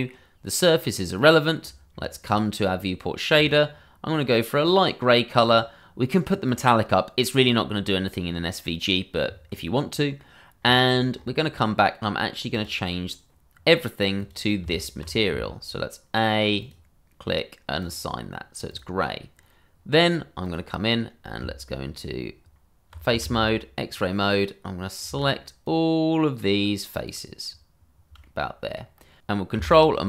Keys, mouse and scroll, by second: 1.6-1.9 scroll down 1, 3.3 click, 10.6 scroll, 12.5 click, 16.6 click, 23.9 click, 25.6 shift+click, 25.7 click, 28.1 s, 28.2 middle click, 28.8-29.2 scroll.